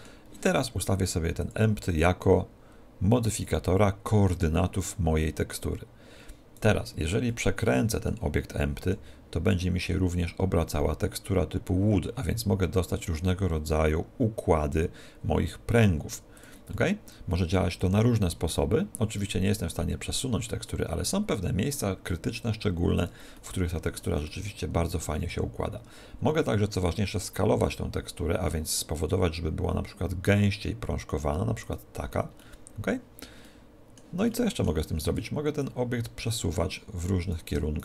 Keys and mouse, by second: 1.4 click, 6.8 right click, 7.4-9.4 middle drag, 9.0 r, 16.6 click, 16.8-18.0 middle drag, 18.0 r, 18.4 middle click, 23.2 click, 23.4-26.2 middle drag, 25.3 s, 31.8 click, 32.5-36.1 middle drag, 35.7 click.